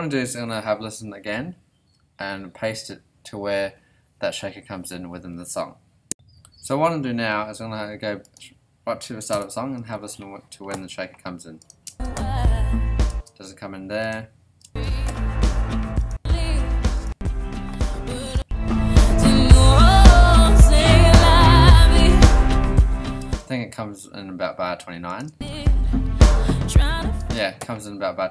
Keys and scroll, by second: 9.3 Return, 9.9 super+s, 11.9 space, 13.1 space, 14.6 space, 23.2 space, 25.2 space, 27.2 space.